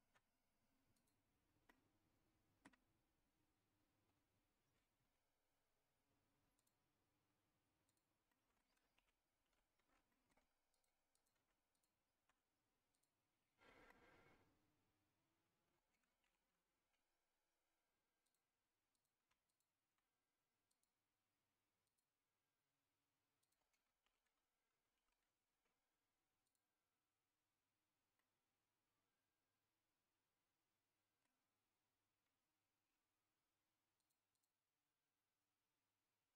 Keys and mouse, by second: 0.9 click, 1.7 middle click, 6.6 click, 7.9 click, 8.3 middle click, 9.0 ctrl+z, 9.4 ctrl+z, 10.1 middle click, 11.1 click, 11.7 shift+click, 12.9 click, 13.9-15.9 middle drag, 16.2 ctrl+z, 18.2 click, 19.5 shift+click, 20.7-22.7 drag, 23.4 click, 24.0 ctrl+z, 24.9 ctrl+z, 26.4 click, 28.2-31.2 middle drag, 34.0 click, 34.3 click.